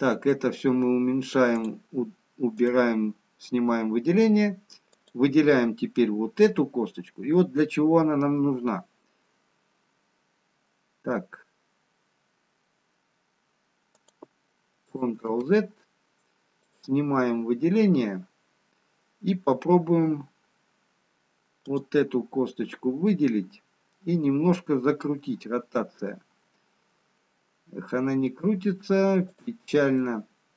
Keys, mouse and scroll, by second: 0.9 middle click, 0.9-1.6 scroll down 4, 2.3 click, 2.9 click, 3.5 scroll up 2, 4.3 scroll down 1, 4.9 click, 8.6 r, 15.5 ctrl+z, 16.5 click, 21.5 click, 26.0 r, 30.0 middle click.